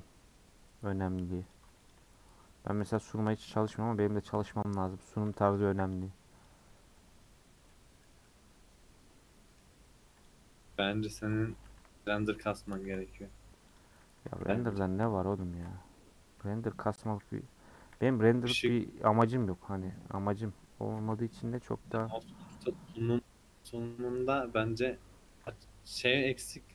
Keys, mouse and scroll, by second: 1.5 click, 3.4 click, 5.1 a, 6.5 u, 7.7-9.9 middle drag, 9.9-10.2 scroll up 1, 10.2 click, 10.5-12.3 scroll down 2, 12.3 alt+click, 12.8 a, 13.8 click, 14.2 a, 14.8 u, 15.5 Tab, 16.4 /, 16.8-17.8 scroll down 4, 17.8 h, 18.0 middle click, 18.8 click, 19.0 middle click, 19.3 scroll down 1, 19.4 middle click, 20.1 Tab, 20.5 Tab, 21.5 /, 22.0 middle click, 22.5 Tab, 23.0-24.4 middle drag, 24.4 scroll up 2, 24.7-25.7 middle drag, 25.7 scroll down 2, 26.0-26.7 middle drag.